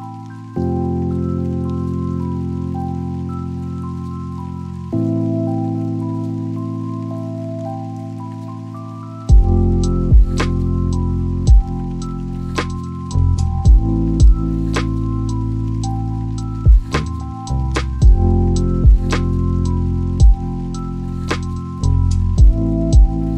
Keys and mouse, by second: 3.0 click, 5.5 click, 8.0 click, 9.4 click, 13.3 click, 15.7 click, 16.9 click.